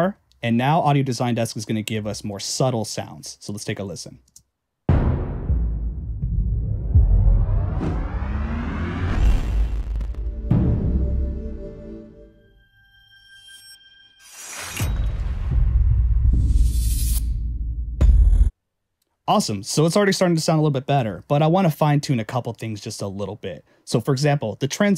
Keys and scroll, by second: 1.9 Return, 4.3 space, 18.5 space.